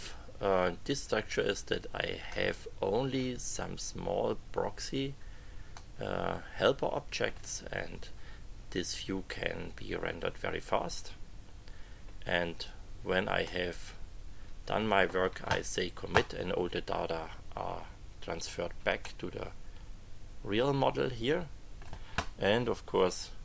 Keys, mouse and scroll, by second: 2.3 middle click, 2.9 click, 5.7 click, 6.3 middle click, 6.9 click, 13.4-14.9 middle drag, 19.0 click, 19.3-22.0 middle drag, 22.9 click.